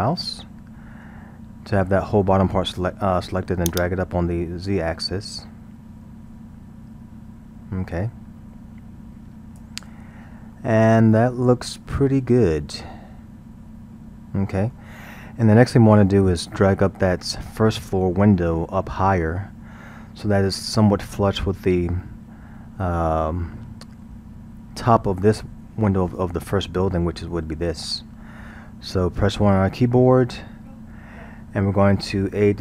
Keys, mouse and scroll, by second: 3.7-6.7 drag, 10.5-13.6 middle drag, 16.6-17.4 scroll, 17.8-20.8 middle drag, 29.5 KP_1.